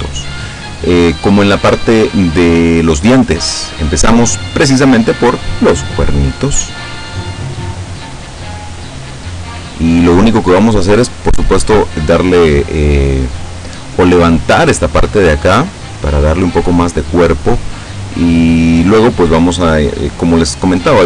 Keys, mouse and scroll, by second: 1.2-5.6 middle drag, 7.4-10.8 drag, 11.0-19.3 middle drag.